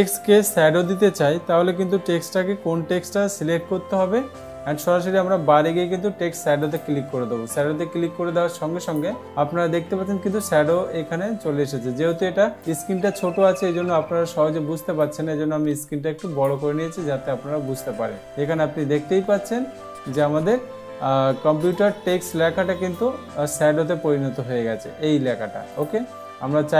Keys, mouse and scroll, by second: 7.2 click, 9.3 click, 13.1-14.1 drag, 15.6-16.6 drag, 22.3 click, 26.3 click.